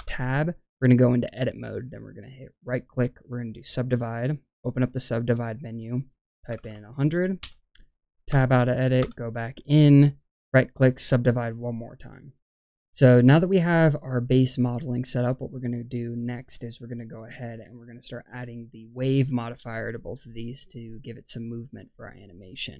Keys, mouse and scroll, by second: 0.0 Tab, 2.6-3.4 right drag, 4.7 right click, 4.7 click, 5.8-7.4 drag, 6.6 KP_0, 8.2 Tab, 8.9 Tab, 10.3 right click, 12.3 Tab, 21.4-22.7 middle drag.